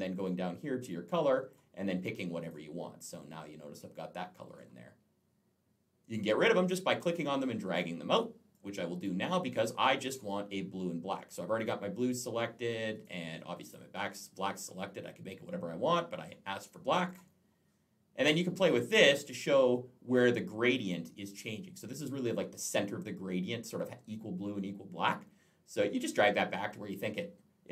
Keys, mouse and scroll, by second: 0.7 click, 2.2 click, 2.3 click, 6.8 click, 8.4 click, 9.4 click, 11.5 click, 12.8 click, 13.5 click, 17.5 click, 18.4 click.